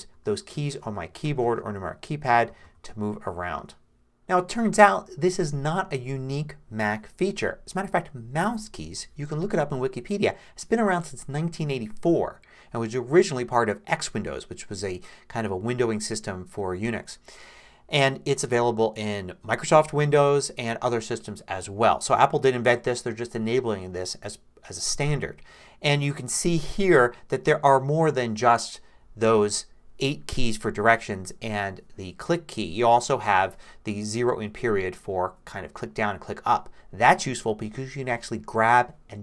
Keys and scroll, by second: 0.5 6, 1.2 4, 2.3-3.6 typing.